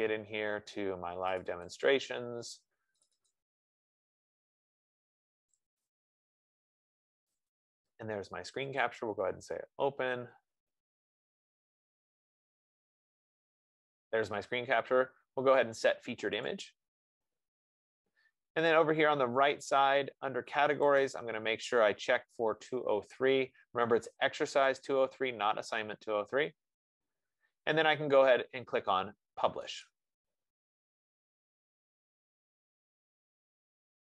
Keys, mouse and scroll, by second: 1.8 click, 2.0 click, 3.4 click, 3.7 click, 6.0 click, 6.1 click, 7.7 click, 9.2 click, 14.1 click, 16.8 click, 21.3 click, 22.5 middle click, 23.1 middle click, 24.6 scroll, 25.1 click, 27.0-27.8 scroll, 27.8-28.3 scroll, 30.5 click.